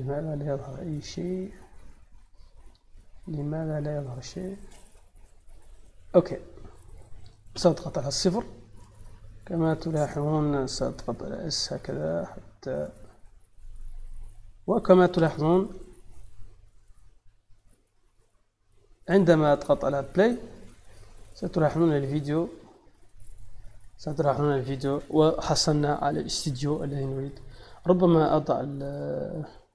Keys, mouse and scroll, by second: 2.7 shift+middle click, 4.5 click, 8.7 click, 9.5 click, 11.2 s, 13.5 click, 14.1 middle click, 16.8 middle click, 17.4 shift+middle click, 18.6 scroll up 1, 19.1-19.4 shift+middle drag, 20.4 click, 27.6 click, 28.5 click, 29.4 middle click.